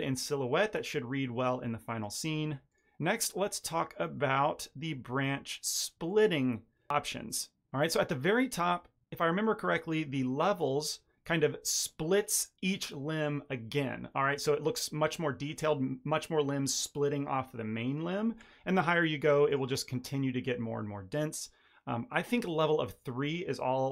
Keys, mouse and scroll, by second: 0.4-2.6 scroll up 2, 2.6 click, 3.6 click, 10.5 click, 11.2 middle click, 14.2-14.7 scroll up 2, 14.7 middle click, 19.4 click, 22.4 click, 23.2 middle click, 23.8-23.9 scroll down 3.